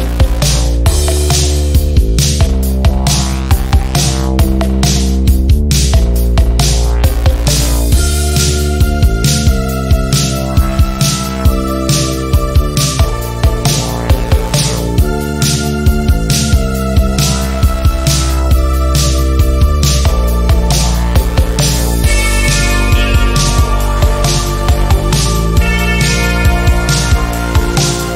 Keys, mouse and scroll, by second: 7.9 ctrl+scroll down 1, 8.7-9.9 click, 11.6 ctrl+g, 12.3 shift+click, 13.2 click, 14.1 ctrl+z, 14.6 click, 16.4 shift+click, 17.2 click, 20.9 typing, 21.3 click, 22.0-23.4 typing, 23.9 click, 26.5 click, 27.1-28.0 typing.